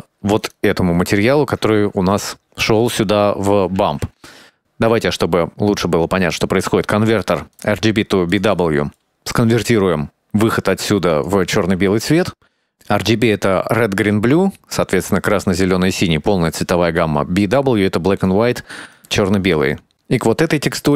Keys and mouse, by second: 0.6 ctrl+shift+click, 2.5 middle click, 3.9 shift+a, 8.7 middle click, 9.8-10.9 drag, 11.7 ctrl+shift+click, 13.1-13.6 drag, 14.3-14.8 drag, 17.0-17.3 drag, 17.6-18.0 drag, 19.7 shift+middle click.